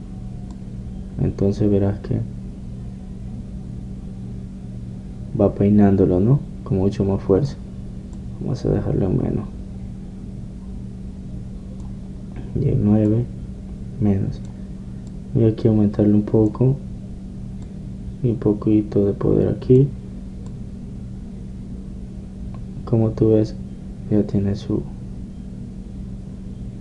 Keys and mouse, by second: 1.7-18.0 drag, 18.8-20.8 drag, 21.7-26.8 drag.